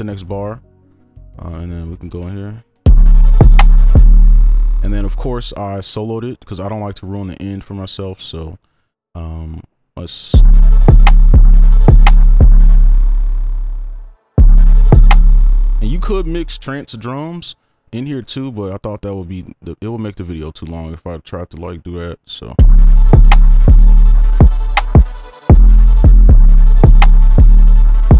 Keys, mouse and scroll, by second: 1.5 right click, 2.3-2.7 alt+scroll up 16, 2.8 space, 3.0 right click, 10.3-12.7 typing, 14.3 space, 15.1 space, 22.6 space, 25.5 double click, 25.8 right click, 26.1 space, 26.3 space, 27.7 right click.